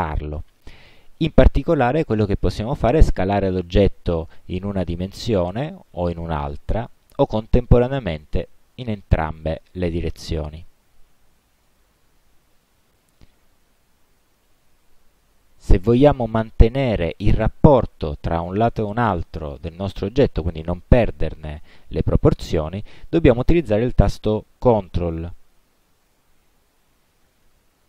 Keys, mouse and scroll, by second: 3.8-5.8 drag, 6.4-7.5 drag, 8.2-12.1 drag, 14.6-15.3 drag, 25.5-27.8 ctrl+drag.